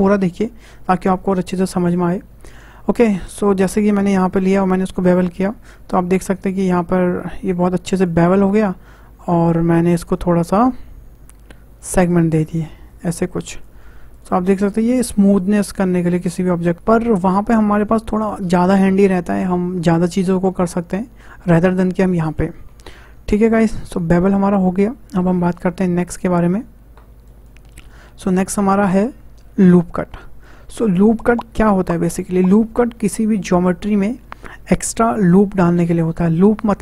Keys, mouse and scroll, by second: 5.2 click, 12.1-14.2 drag, 14.3 Tab, 15.0 scroll up 2, 15.5-16.8 middle drag, 25.4 shift+a, 28.0 Tab, 28.5-31.6 shift+middle drag.